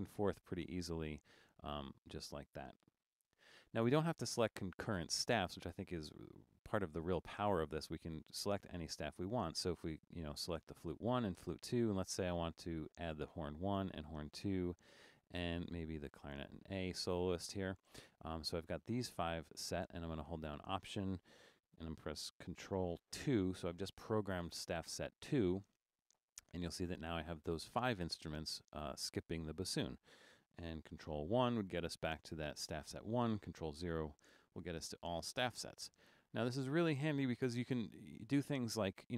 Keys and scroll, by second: 0.5 ctrl+1, 3.2 ctrl+0, 23.3 ctrl+alt+2, 31.4 ctrl+1, 33.7 ctrl+0.